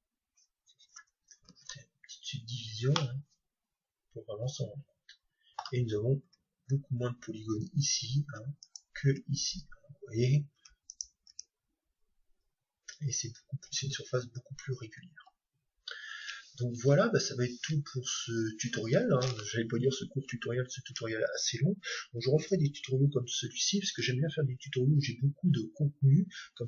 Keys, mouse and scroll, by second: 1.5 ctrl+3, 2.9-4.9 middle drag, 6.3 Tab, 8.4 Tab, 8.7-10.5 right drag, 10.5 Tab, 11.0-12.9 right drag, 11.3 Tab, 13.8 Tab.